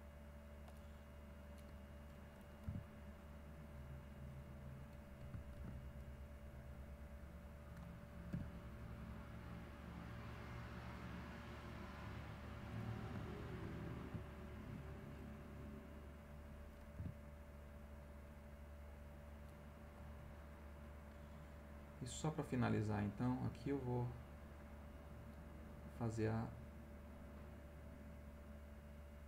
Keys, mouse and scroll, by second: 0.1 click, 1.2 middle click, 2.6 e, 3.3-4.6 drag, 5.6 ctrl+z, 6.0-7.6 ctrl+drag, 8.3 e, 8.7-12.7 drag, 12.8-14.1 ctrl+middle drag, 16.9 e, 17.6 click, 18.0 scroll up 2, 18.2 click, 18.6-18.9 scroll up 2, 18.9 click, 19.2-19.6 scroll up 2, 19.6 middle click, 20.9 middle click, 22.4 click, 23.4 click, 27.3 click, 27.9 click, 28.8-29.2 drag.